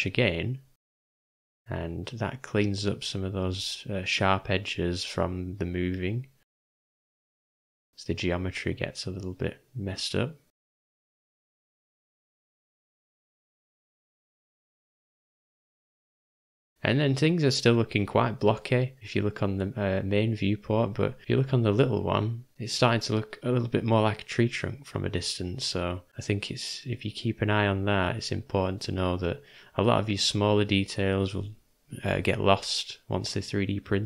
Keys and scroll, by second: 1.3 j, 2.9 ], 3.0 ], 12.2 ], 12.3 ], 13.4 [, 13.7 [, 17.4 [, 17.5 [, 23.3-24.4 typing, 27.9-29.4 typing.